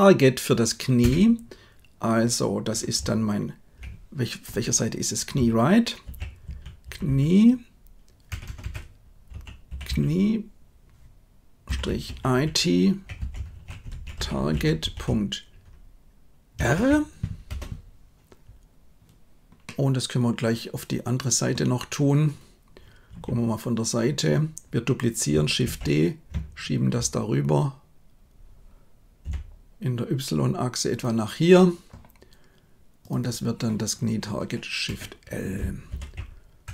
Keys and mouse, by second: 7.0 e, 8.4 BackSpace, 8.6 BackSpace, 9.8 e, 19.7-21.4 middle drag, 23.1 KP_3, 25.7 shift+d, 33.0-36.7 drag.